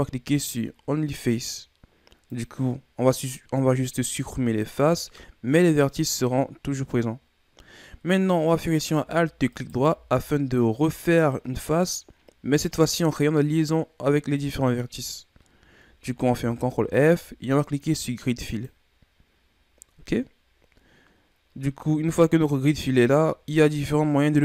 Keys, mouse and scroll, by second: 3.5-6.6 middle drag, 7.8-9.5 middle drag, 9.5-12.5 alt+right drag, 16.3 ctrl+f.